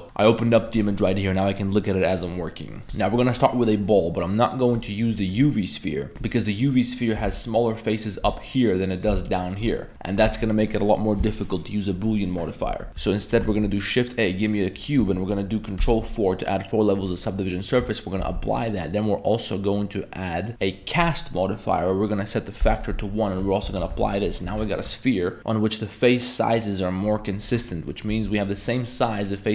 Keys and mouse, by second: 0.2 middle click, 2.8 Tab, 2.8 x, 2.8 shift+a, 5.1 middle click, 6.1 Tab, 6.1 3, 6.1 middle drag, 6.9 right click, 8.1 ctrl+shift+right click, 8.3 middle click, 8.9 right click, 9.5 ctrl+shift+click, 10.1 middle click, 10.3 Tab, 12.9 ctrl+3, 12.9 x, 13.5 shift+a, 15.8 ctrl+4, 17.1 click, 17.7 click, 18.2 ctrl+a, 18.6-21.1 drag, 22.4 click, 23.3 click, 23.7 ctrl+a, 23.9 Tab, 24.5 Tab, 27.9 middle click, 28.2 3, 28.9 middle click, 29.2 right click.